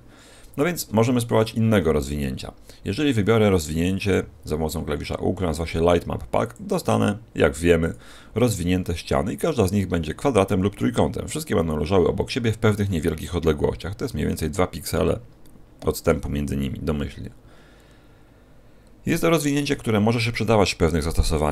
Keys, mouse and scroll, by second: 0.4 a, 1.3 a, 1.7 w, 4.0 u, 11.9-12.6 scroll up 2, 14.2-14.6 scroll up 8, 16.3-17.1 scroll down 5, 17.1-18.3 scroll down 2, 18.3-18.7 scroll down 1, 19.1 scroll down 2, 20.3-20.9 scroll down 1, 20.9 middle click.